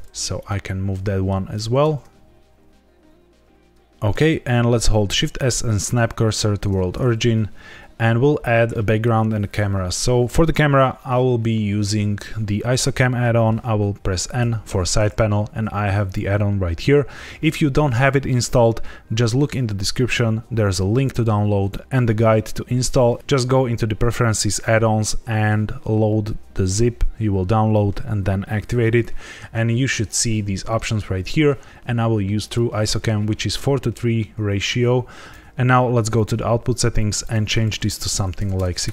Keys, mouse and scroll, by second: 0.3 click, 1.0 middle click, 1.5 g, 1.8 shift+z, 2.0 click, 3.7 click, 3.8 shift+middle click, 5.0 shift+s, 7.0 scroll down 2, 7.6 scroll up 2, 14.3 n, 16.0 click, 32.4 click, 35.3 click, 35.3 scroll down 1, 36.1 click, 36.8 click, 37.1 click, 38.5 KP_0.